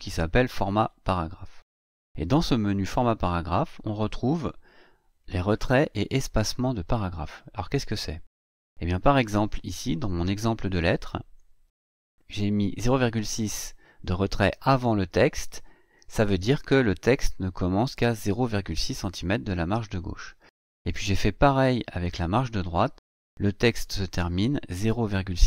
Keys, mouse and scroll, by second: 11.4 Right, 21.2 Right.